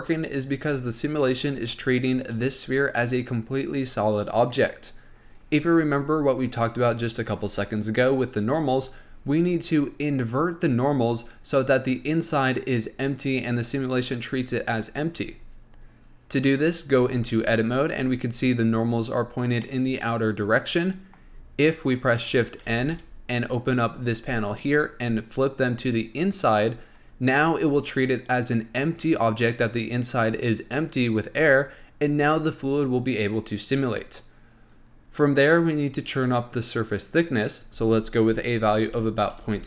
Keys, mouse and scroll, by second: 9.9 scroll up 2, 13.8-14.7 scroll down 3, 14.7-17.3 scroll up 2, 17.3 Tab, 19.0-19.9 scroll up 1, 19.9-22.9 middle drag, 23.0 shift+n, 24.8 click, 26.1 click, 28.0 click, 37.6-39.6 drag.